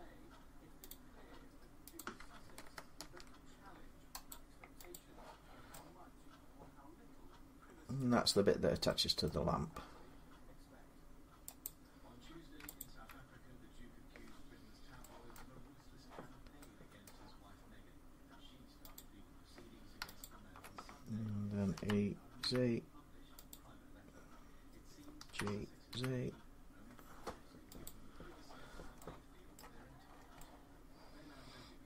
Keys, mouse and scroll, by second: 0.7 click, 1.8 click, 2.8 ctrl+r, 3.3 scroll, 4.1 click, 4.6 middle click, 4.7 click, 5.3 middle click, 5.4 middle click, 7.6-8.1 scroll, 8.4 middle click, 9.1 scroll, 9.4 scroll down 1, 11.5 click, 12.6 alt+click, 14.3 scroll, 15.1 shift+middle click, 15.6 scroll, 16.9 middle click, 18.8 click, 20.0 shift+middle click, 20.0 alt+click, 21.6-22.2 typing, 23.3 click, 24.8-26.5 typing, 27.7 click, 28.4-28.8 scroll, 29.1-30.2 scroll down 10, 29.4 middle click, 31.4-31.7 scroll up 3, 31.7-31.8 middle click.